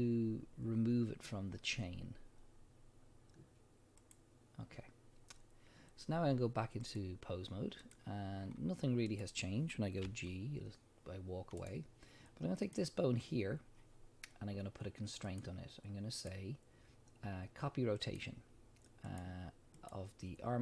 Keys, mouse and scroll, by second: 6.8-9.2 drag, 8.4-8.7 scroll down 1, 10.0 g, 11.7 right click, 12.6 click, 15.3 click, 16.1-20.6 drag.